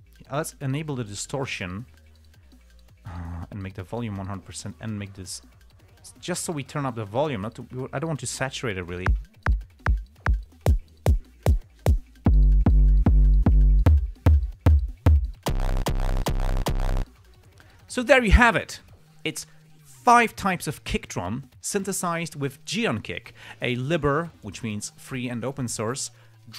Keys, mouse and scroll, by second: 0.2 click, 1.2 click, 3.7-4.7 drag, 5.3-8.0 drag, 9.1 click, 9.5 space, 15.0 scroll down 2, 17.1 click, 17.4 space.